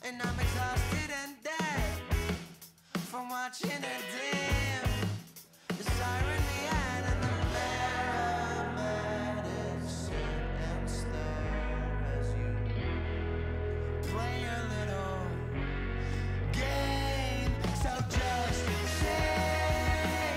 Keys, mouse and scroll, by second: 0.0-0.1 typing, 0.0 click, 0.1 Tab, 0.5 click, 0.5 right click, 0.7 middle click, 0.9 click, 0.9 right click, 1.1 middle click, 1.3 middle click, 1.5 click, 1.5 right click, 1.5 z, 1.8 middle click, 1.8 right click, 1.8 z, 2.3 middle click, 2.4 click, 2.4 KP_0, 4.9 click, 4.9 shift+d, 5.1 middle click, 5.3 click, 6.3 middle click, 6.6 click, 7.8 right click, 7.8 z, 7.8 m, 8.2 click, 8.2 right click, 8.4 middle click, 10.3 click, 10.3 m, 10.5 middle click, 11.1 middle click, 11.3 click, 12.1 click, 12.9 click, 13.3 click, 13.4 middle click, 13.6 click, 14.0 click, 14.4 click, 14.8 click, 15.2 click, 15.6 click, 16.3 right click, 17.2 middle click, 17.4 click, 18.2 middle click, 18.6 click, 20.0 super+s, 20.0 click, 20.3 middle click, 20.3 KP_0.